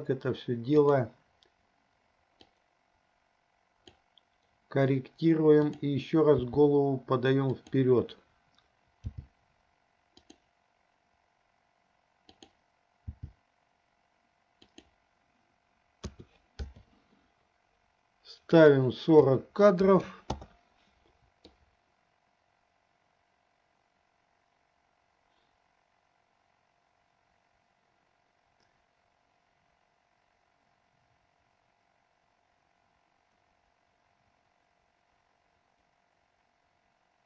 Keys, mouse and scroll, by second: 2.7-4.3 drag, 5.8 click, 6.7 g, 9.2 g, 12.4 click, 13.4 g, 16.4 a, 17.0 i, 18.6-20.6 drag, 21.7-37.2 drag.